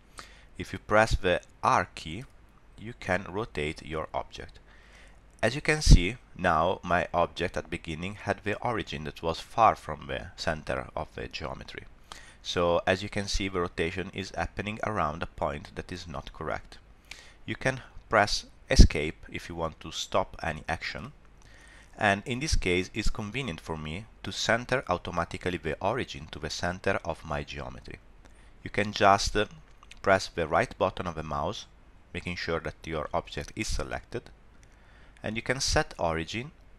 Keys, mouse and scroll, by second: 2.1 r, 29.5 click, 34.2 right click.